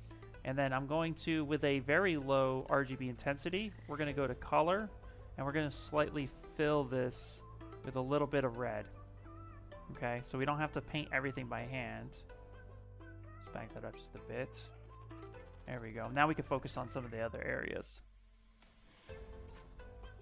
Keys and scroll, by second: 0.4 space.